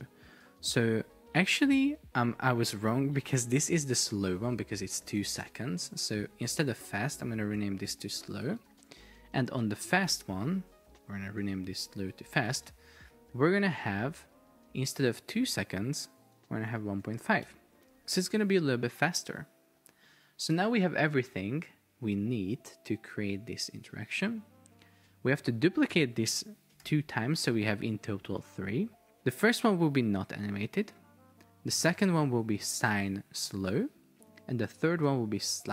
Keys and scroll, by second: 5.1 super+r, 5.5 Left, 5.8 Right, 6.5 Right, 7.2 Delete, 7.6 Right, 7.9 Delete, 8.5 shift+s, 8.9 Return, 11.0 super+r, 11.2 super+Right, 11.5 alt+Left, 12.0 alt+BackSpace, 12.4 shift+f, 12.7 Return, 17.5 Return, 26.0 super+d.